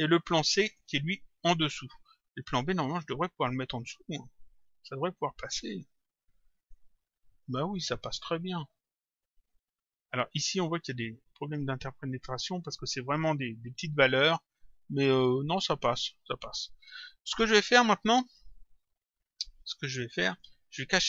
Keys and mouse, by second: 0.2 click, 2.5 click, 4.5 Home, 5.5 Return, 11.4 click, 17.4 click, 20.0 click.